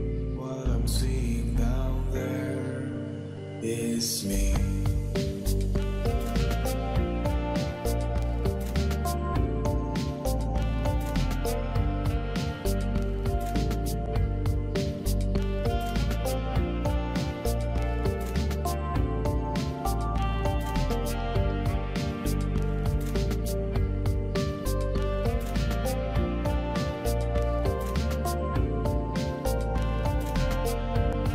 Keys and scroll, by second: 7.0 typing, 8.8 4, 9.3 Return, 11.0 Return, 13.2 v, 24.2 ctrl+c, 24.9 ctrl+v.